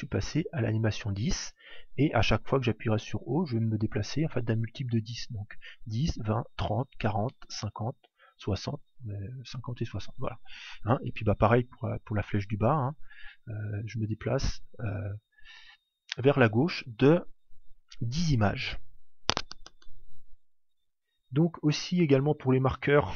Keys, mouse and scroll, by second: 5.8 shift+Up, 6.5 shift+Up, 7.4 shift+Up, 13.0 shift+Down, 13.7 shift+Down, 14.3 shift+Down.